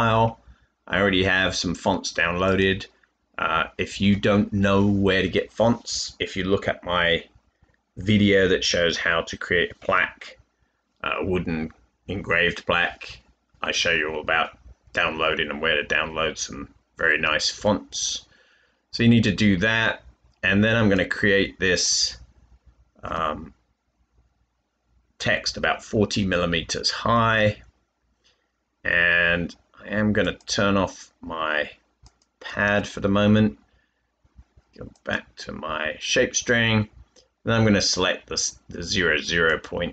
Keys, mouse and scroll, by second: 23.0 typing, 32.6 typing, 36.2-38.0 typing.